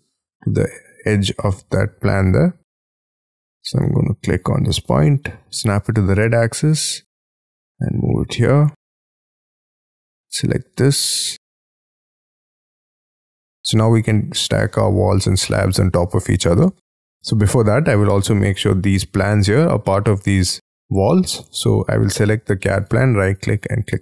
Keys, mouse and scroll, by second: 0.1-0.7 scroll up 8, 0.7 middle click, 1.6-2.6 scroll down 5, 2.6-4.7 scroll up 12, 4.7 right click, 5.6-6.1 scroll down 12, 6.5-8.0 scroll up 9, 8.0-9.2 scroll down 22, 9.2 space, 9.3-10.2 scroll up 4, 10.2-10.7 scroll up 7, 11.1 ,, 11.4 m, 13.1-13.6 scroll down 7, 13.6 middle click, 17.6-18.0 scroll up 12, 18.1 middle click, 18.7 scroll down 1, 19.2-22.0 scroll down 10, 22.7 right click.